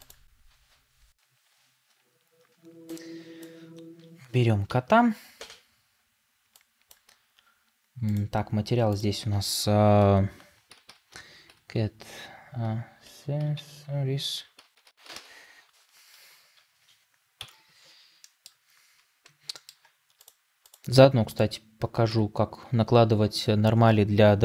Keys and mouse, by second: 3.2-6.8 drag, 20.0-23.3 drag.